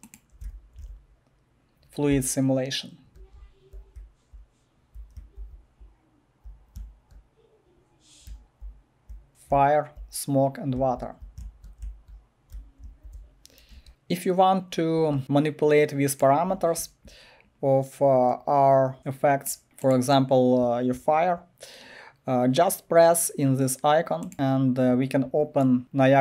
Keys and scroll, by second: 0.0-6.8 typing, 8.0-12.8 typing, 13.7 Escape.